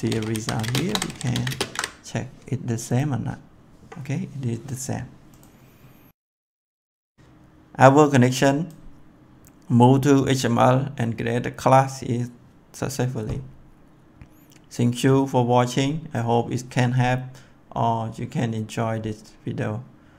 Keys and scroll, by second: 0.0-1.8 typing.